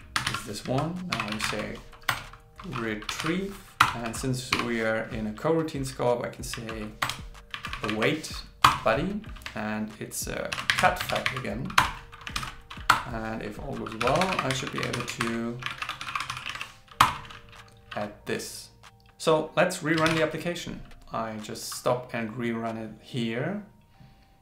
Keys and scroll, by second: 10.6 shift+c, 11.1 shift+f, 12.4 super+Right, 15.2 shift+8, 16.5 shift+s, 20.1 ctrl+shift+r.